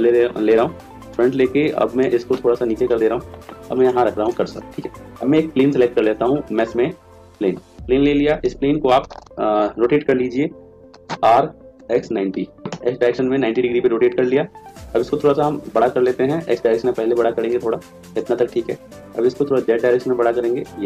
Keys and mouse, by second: 2.0 click, 3.8-5.3 right drag, 4.3 click, 5.5 shift+a, 11.2 r, 15.3 s, 19.0 s.